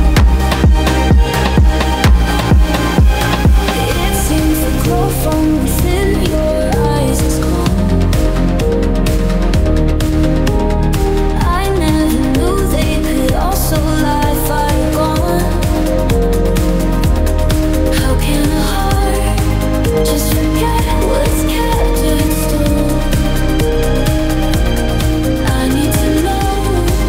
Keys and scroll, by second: 0.6 ctrl+g, 4.3 Delete, 12.8 o, 13.2 i.